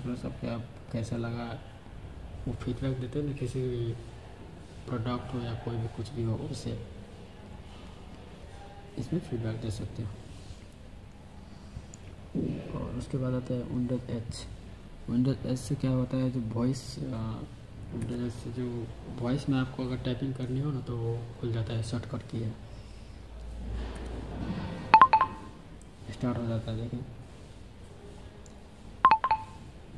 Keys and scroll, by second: 17.9 super+h, 23.8 super+h.